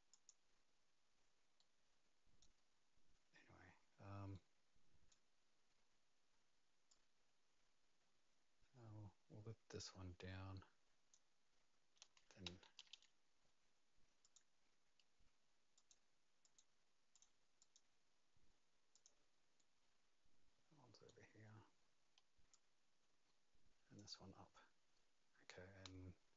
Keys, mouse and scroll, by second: 0.1 click, 1.6 right click, 4.3 right click, 6.9 click, 11.1 right click, 11.1 click, 12.0 Escape, 12.4 Escape, 12.9 Escape, 14.2 click, 15.7 click, 17.1 click, 17.6 click, 19.6 click, 19.6 right click, 22.5 click.